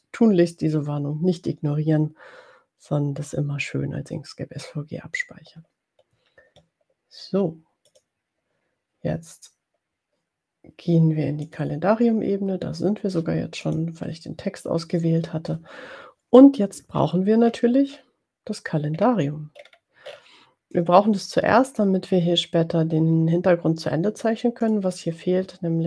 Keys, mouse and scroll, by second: 7.8 click, 11.5 click, 13.9 click, 17.1-18.0 ctrl+scroll down 4, 18.1 ctrl+scroll down 2, 19.2-20.4 ctrl+scroll up 5, 24.6 click.